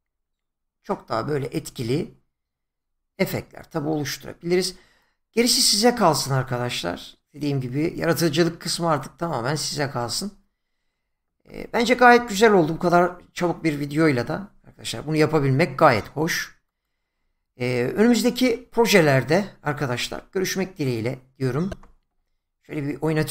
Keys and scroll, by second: 21.7 space.